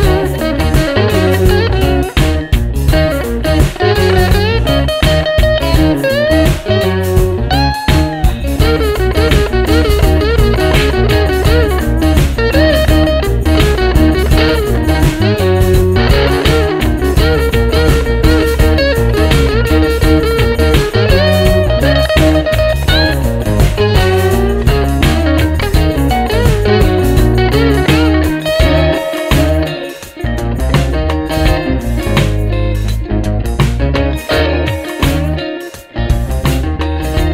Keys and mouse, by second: 0.9 alt+click, 2.7 ctrl+z, 4.6-5.6 typing, 6.9 alt+click, 8.0 double click, 9.5 alt+click, 11.6 alt+click, 13.8 alt+click, 15.3 ], 15.5 ], 15.7 ], 16.9 alt+click, 19.0 right click, 22.2 alt+click, 22.9 alt+click, 23.8 double click, 26.5 alt+click, 29.2 alt+click, 30.8 alt+click, 32.4 alt+click, 34.3 alt+click, 36.0 alt+click, 37.1 double click.